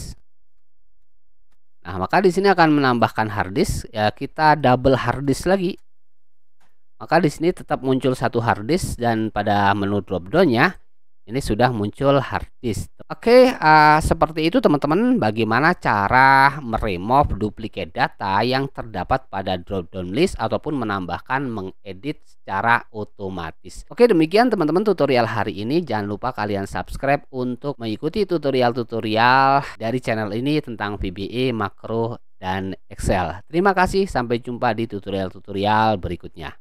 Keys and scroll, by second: 0.0-1.8 typing, 5.3-6.4 typing, 6.6 Return.